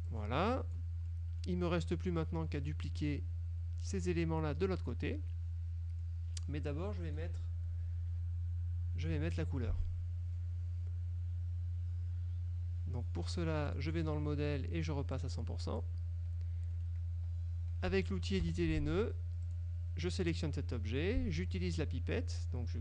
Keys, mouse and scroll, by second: 0.2 click, 1.2 middle click, 6.2 middle click, 13.8 click, 15.2 click, 16.8 middle click, 18.5 F2, 19.6 click.